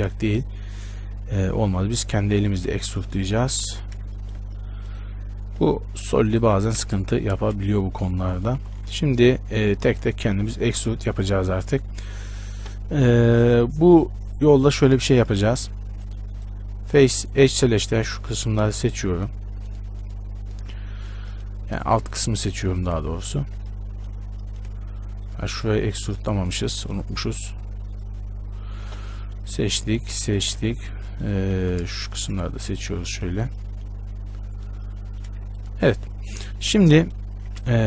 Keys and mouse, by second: 3.9 z, 6.5-7.6 drag, 7.6 shift+space, 8.8 z, 9.1 Tab, 12.7 a, 16.2-20.9 drag, 17.1-20.9 right drag, 21.1 right click, 21.5-23.9 right drag, 25.9 e, 30.9 z, 31.7 z, 36.1 z.